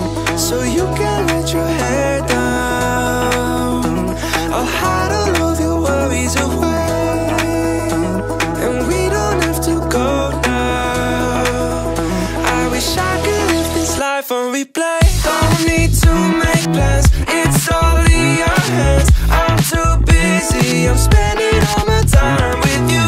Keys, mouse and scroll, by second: 0.0 click, 0.3-1.1 drag, 2.8 Tab, 3.2 middle click, 5.0 click, 5.7 alt+click, 6.9 /, 7.6 middle click, 9.5 alt+shift+click, 10.0 middle click, 11.3 alt+shift+click, 11.9 alt+shift+click, 12.9 ctrl+z, 13.5 ctrl+z, 14.3 alt+shift+click, 15.1 ctrl+z, 15.9 alt+shift+click, 16.9 click, 17.6 click, 19.1-19.4 scroll down 2, 19.4 Tab, 21.3 /, 22.0 click, 22.5 click.